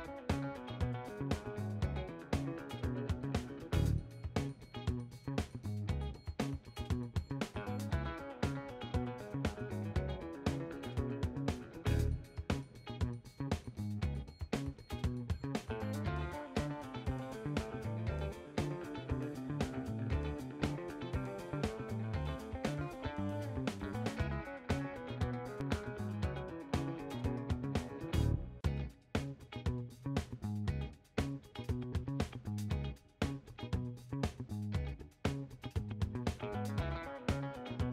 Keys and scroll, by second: 10.7-11.5 typing, 13.9-14.7 typing, 14.7 Return, 18.9 5, 19.0 Return, 21.9 3, 22.8 BackSpace, 23.3 5, 23.5 Return, 25.1-25.9 typing, 30.4-31.7 typing, 33.1-34.0 typing, 36.9-37.9 typing.